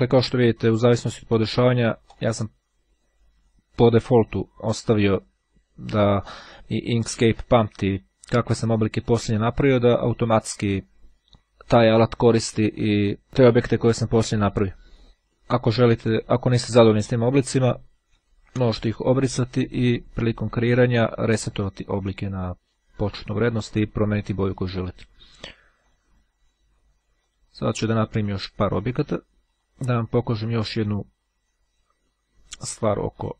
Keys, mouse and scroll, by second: 1.7-2.8 drag, 8.4 click, 15.4 click, 16.5 click, 17.4 shift+click, 18.3 Delete, 19.7 click, 21.6 click, 24.8 click, 25.9 click, 27.4 click, 29.6 click, 33.1 click.